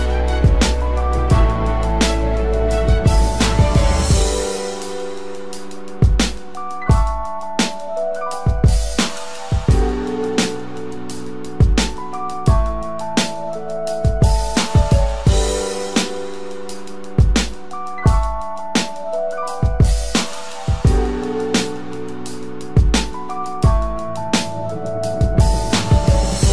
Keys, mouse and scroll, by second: 0.5 double click, 3.3 alt+scroll up 1, 8.6-10.2 scroll down 1, 16.6-18.8 typing.